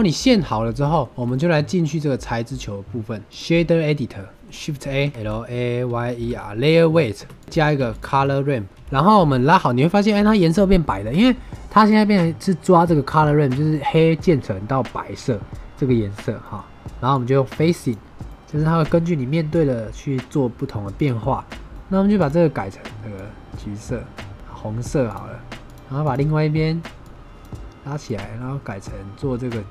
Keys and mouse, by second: 0.6 shift+middle drag, 0.8 middle drag, 1.1 shift+middle click, 1.2 click, 3.2 click, 4.3 middle click, 4.3 n, 4.9 shift+a, 7.4 click, 7.7 shift+a, 9.3 click, 9.3 right click, 10.3 middle click, 11.7 click, 16.4 middle drag, 17.0-17.8 drag, 18.2 middle click, 18.7-21.1 middle drag, 22.1 click, 25.6 click, 25.9 click.